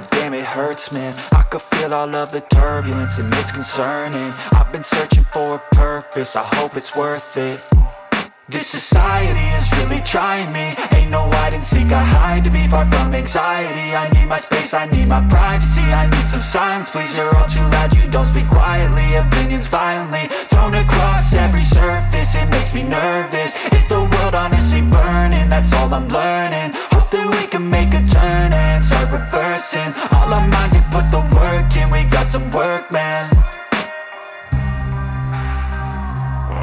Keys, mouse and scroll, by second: 4.6 double click, 12.9 typing, 17.2-17.5 typing, 18.5 Return, 21.1 alt+space, 21.1 alt+click, 21.4 alt+space, 23.7 double click.